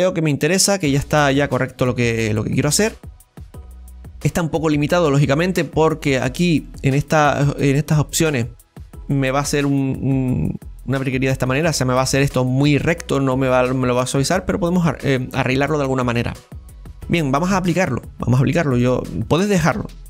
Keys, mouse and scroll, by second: 4.4-5.1 scroll up 1, 5.1-6.3 middle drag, 6.3-9.0 scroll up 2, 6.7-9.7 middle drag, 13.9-14.4 scroll down 6, 14.4-18.5 middle drag, 18.6 click.